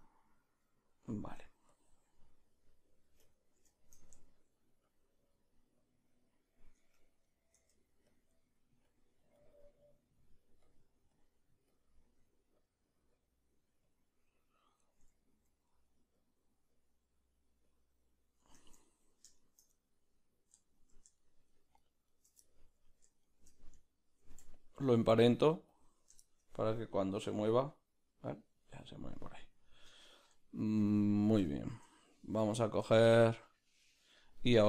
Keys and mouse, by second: 1.8 Tab, 1.8 b, 5.2-7.3 drag, 5.3 middle click, 7.0 Tab, 7.3 right click, 8.2 Tab, 8.2 b, 8.3 middle click, 9.1-18.8 drag, 15.2 ctrl+middle click, 18.6 Tab, 18.8 ctrl+middle click, 19.4 shift+right click, 19.7-21.2 middle drag, 21.2-22.4 shift+right drag, 22.4 ctrl+middle click, 23.3-25.8 shift+right drag, 25.8 ctrl+p, 26.2-30.0 shift+middle drag, 27.1 Right, 30.0 right click, 30.5-34.4 shift+middle drag, 34.4-34.6 right drag.